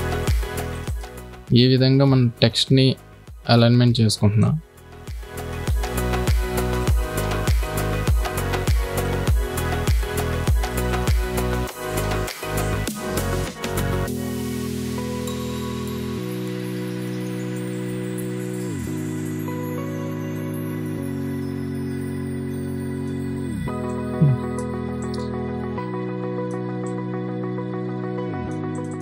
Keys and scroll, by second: 1.9 ctrl+v, 6.1 ctrl+x, 11.8 ctrl+s, 19.0 ctrl+t.